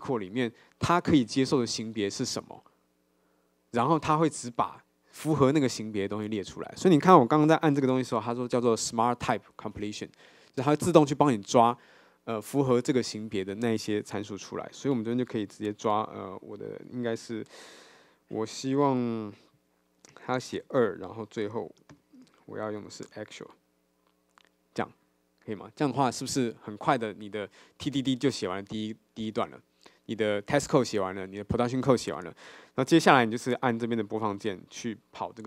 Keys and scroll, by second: 19.6 Escape, 22.0 ctrl+shift+space, 23.1 Return.